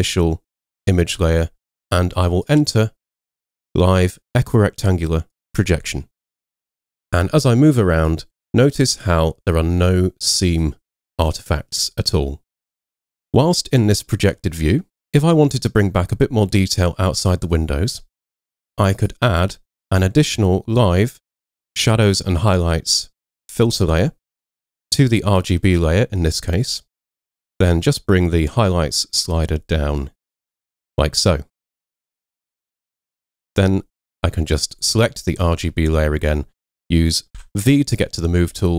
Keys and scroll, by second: 37.4 c.